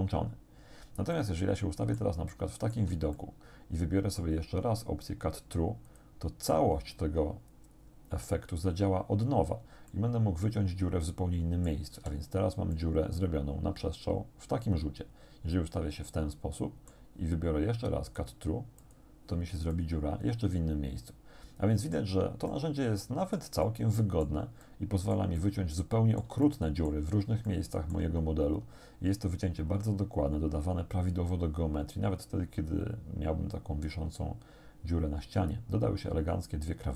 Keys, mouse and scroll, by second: 1.2-2.2 shift+drag, 2.3 shift+click, 2.8 z, 3.2-4.4 drag, 9.9-11.9 drag, 12.0 z, 12.4 scroll down 1, 12.8-17.1 drag, 18.1 click, 18.9 click, 19.7-22.2 drag, 22.5-23.6 drag, 24.0 click, 24.7 click, 25.5 click, 26.5 shift+click, 27.5 shift+click.